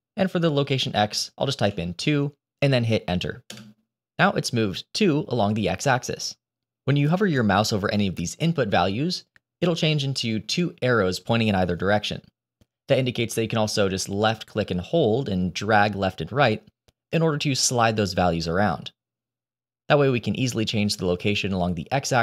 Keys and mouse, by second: 14.1-22.2 drag.